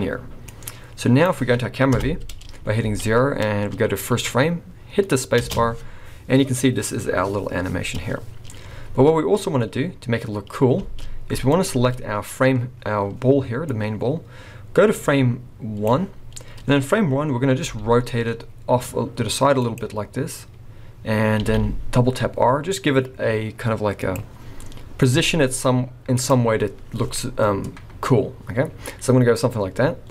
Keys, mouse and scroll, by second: 0.5 click, 1.9 KP_0, 2.8 alt+a, 3.2 scroll up 2, 5.4 space, 9.1 scroll up 3, 10.8 space, 11.5 click, 13.7 click, 16.8-17.6 scroll up 1, 17.6 r, 20.1-20.7 scroll down 1, 21.4 r, 25.2 r.